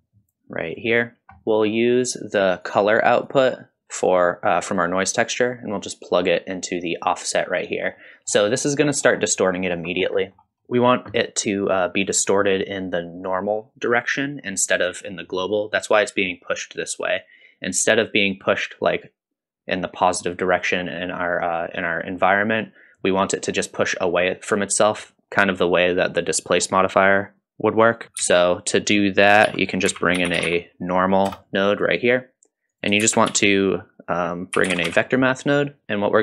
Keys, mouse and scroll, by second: 1.2 click, 1.2 scroll down 1, 1.4 middle click, 1.7 middle click, 2.7 click, 3.3-7.2 drag, 8.0-8.3 middle drag, 9.1-9.5 scroll up 2, 9.5 middle click, 9.9-10.4 scroll up 2, 10.2 middle click, 10.6 middle click, 12.2-12.6 middle drag, 13.3-13.7 middle drag, 14.3 middle drag, 26.0 scroll up 1, 26.4 middle drag, 28.2 shift+a, 33.0 shift+a.